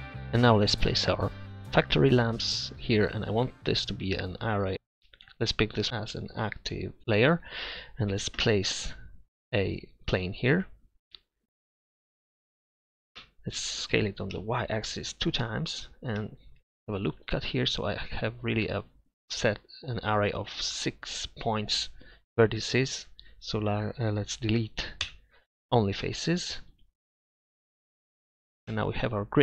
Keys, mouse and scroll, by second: 8.2 shift+a, 13.2 Tab, 13.9 s, 16.6 ctrl+r, 22.3 a, 22.7 a, 25.0 Delete, 28.7 Tab.